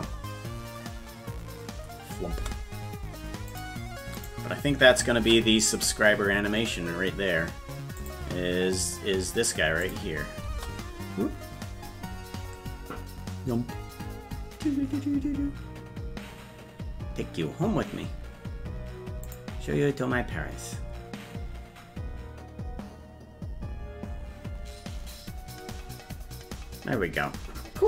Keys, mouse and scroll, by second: 3.5 click, 4.2 right click, 5.4 ctrl+s, 8.0 click, 9.8 click, 10.5 space, 19.3 click.